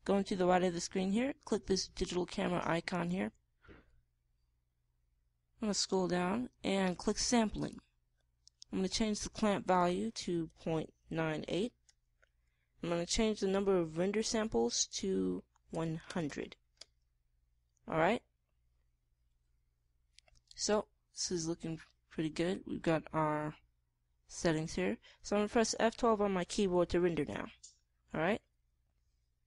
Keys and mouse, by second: 5.8-8.4 middle drag, 10.3 middle click, 12.6-15.8 middle drag, 17.2 KP_0, 17.7 middle click, 23.9-26.3 middle drag, 26.8-28.0 middle drag.